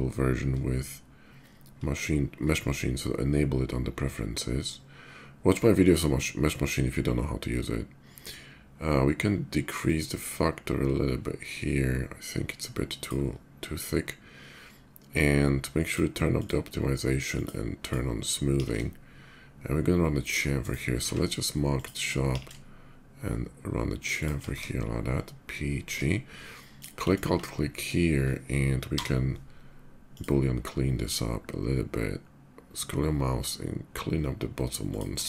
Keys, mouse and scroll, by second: 9.6-12.8 shift+drag, 15.6 shift+click, 16.0 click, 17.0 click, 17.5 click, 18.4 ctrl+b, 20.4 shift+right click, 20.8 q, 21.5 click, 22.1 ctrl+b, 22.6 ctrl+shift+b, 24.0 click, 24.3 Tab, 24.8-25.7 middle drag, 25.8 scroll up 1, 26.5 click, 26.9 alt+click, 28.5 y, 29.8 click, 32.3 middle click, 34.7 click, 34.9 Tab.